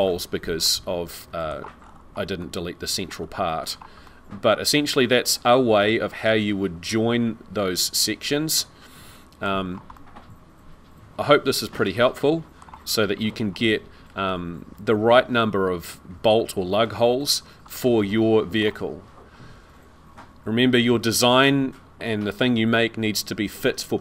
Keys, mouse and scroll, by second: 0.6 middle click, 1.8 scroll up 6, 2.4 middle click, 3.2-4.0 scroll down 7, 4.0 middle click, 9.5-9.9 scroll down 4, 9.9 scroll up 1, 9.9 middle click, 13.2 scroll up 4, 17.2-17.7 scroll down 2, 17.7 middle click, 19.3-19.9 scroll up 4.